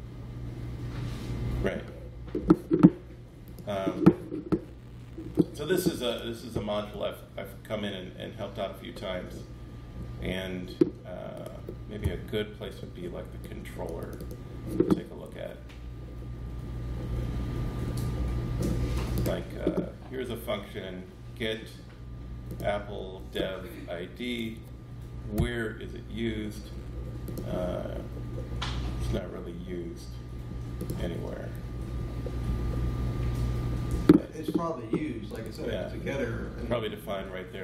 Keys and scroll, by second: 6.8 Left, 7.3 Left, 7.4 Left, 7.4 Left, 7.6 Left, 11.9 Right, 12.4 Down, 15.2 super+x, 25.2 alt+F7.